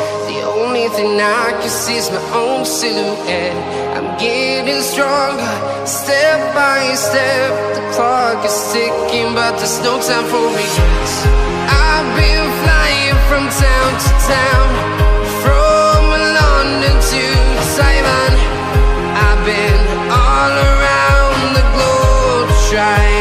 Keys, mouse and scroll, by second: 0.4 alt+scroll up 1, 1.5 scroll down 1, 2.0 scroll up 2, 2.7 scroll up 1, 3.7 click, 6.3 Tab, 7.7 click, 8.7 scroll up 1, 11.1 click, 11.8-15.2 typing, 15.7 Right, 15.9 Down, 16.3-16.7 typing, 16.9 Tab, 18.1 typing, 19.1 space, 19.4 \, 19.6 space, 20.1 Tab, 21.3-23.2 typing.